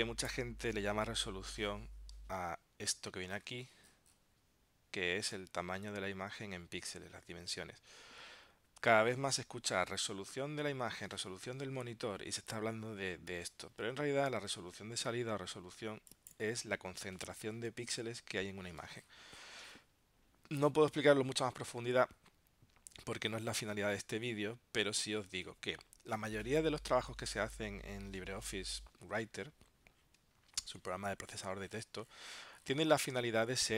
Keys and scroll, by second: 29.4 super+Tab.